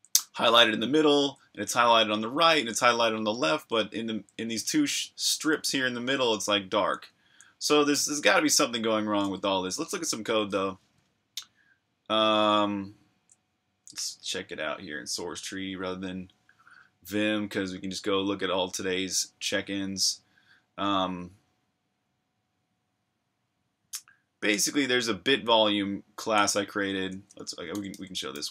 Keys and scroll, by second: 0.0-3.5 typing, 4.6-7.3 typing, 9.8 super+q, 10.8 super+Tab, 26.4 super+Tab, 27.5-28.5 typing.